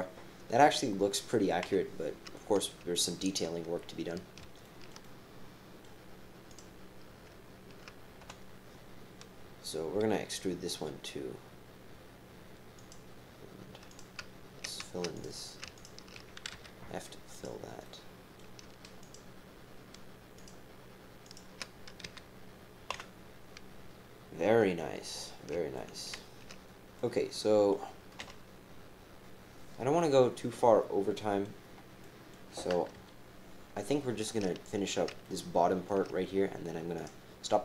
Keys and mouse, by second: 1.6 KP_7, 5.0 middle click, 6.5 click, 8.2 KP_7, 10.0 e, 13.0-14.5 typing, 13.9 click, 15.1 click, 15.7 shift+click, 16.5 f, 17.3 click, 17.8 click, 19.0 shift+click, 20.3 shift+click, 21.3 shift+click, 22.0 f, 22.9 KP_7, 25.7 shift+click, 28.2 KP_7, 30.0-31.4 right drag, 32.0 click, 32.9 KP_3, 35.2 shift+middle click, 35.4 shift+middle click, 35.5 shift+middle click, 36.9 click.